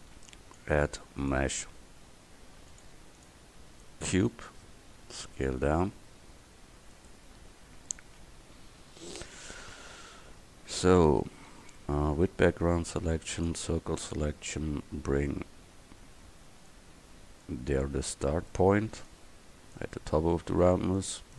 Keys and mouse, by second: 1.6-3.0 drag, 5.0 s, 8.6 KP_1, 10.3 Tab, 11.6 a, 13.0 c, 13.5-16.2 drag, 17.5-20.7 drag, 20.4 a, 20.7 c.